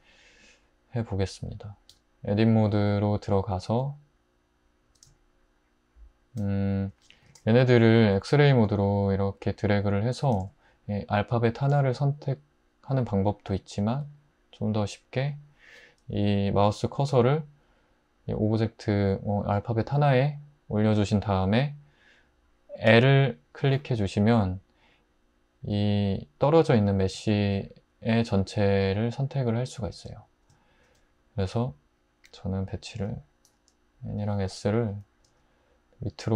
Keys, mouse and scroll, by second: 1.9 Tab, 7.3 alt+z, 10.4 alt+z, 22.9 i, 30.1 ', 33.5 l, 34.2 l, 35.3 g.